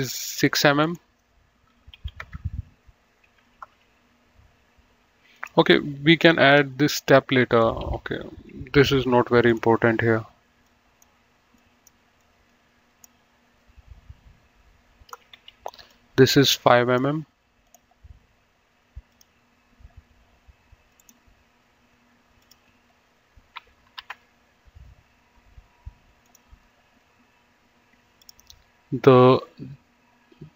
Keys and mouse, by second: 0.6 right click, 1.1 click, 2.4 KP_6, 2.5 Return, 3.9 Escape, 5.6 click, 6.9 Delete, 7.8 click, 8.0 Delete, 9.7 click, 10.9 click, 15.7 Escape, 16.2 click, 17.8 click, 19.4 click, 21.2 click, 22.7 click, 24.3 KP_5, 24.5 Return, 24.5 KP_Enter, 26.5 click, 28.5 click.